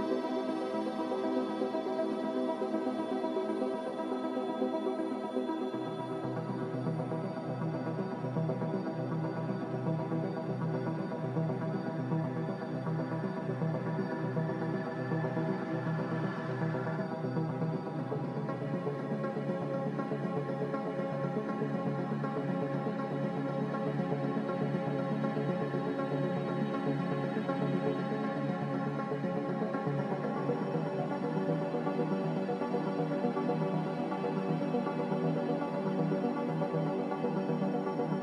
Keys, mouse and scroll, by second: 1.2 Delete, 1.7 Escape, 2.5 ctrl+x, 2.7 ctrl+z, 3.0 ctrl+z, 5.1 ctrl+c, 5.9 ctrl+r, 9.9 Delete, 11.1 ctrl+z, 13.8 Delete, 22.0 x, 23.2-24.0 typing, 27.7-28.5 typing, 30.1 g, 34.7 z, 37.3-38.1 typing.